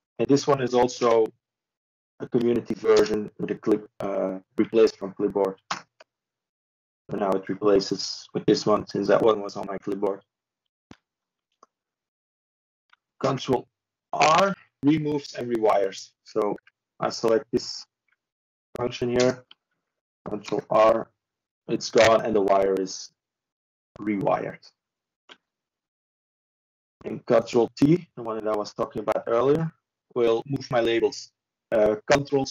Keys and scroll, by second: 0.7 ctrl+f, 15.5 ctrl+s, 22.7 ctrl+space, 23.7 typing, 24.9-27.0 typing, 27.6 ctrl+i.